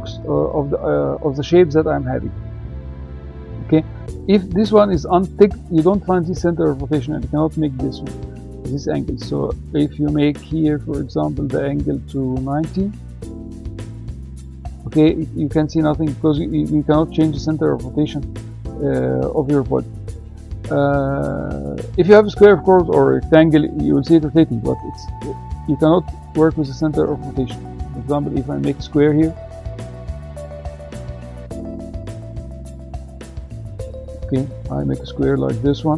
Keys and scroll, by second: 13.0 9, 13.8 Return.